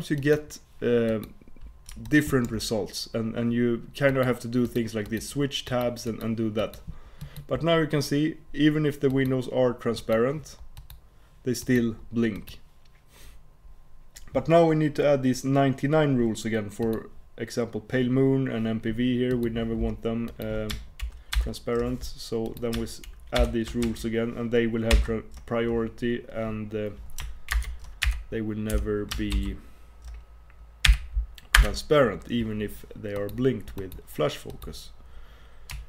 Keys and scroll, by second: 27.6 super+Return.